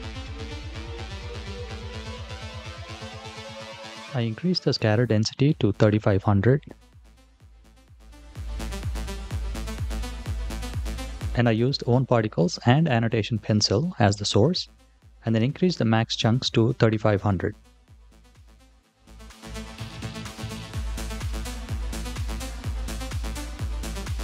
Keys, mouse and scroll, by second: 1.7 click, 3.0-4.8 drag, 4.5 KP_0, 9.2 click, 13.0-14.6 drag, 14.4 KP_0, 21.4 click.